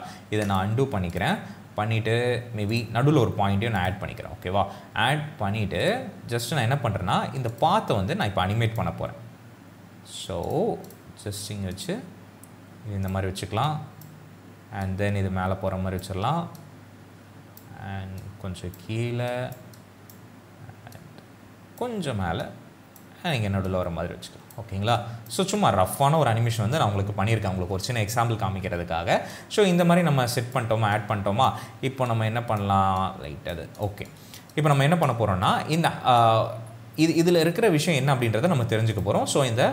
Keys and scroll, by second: 25.4 space, 28.5 space, 34.9 space.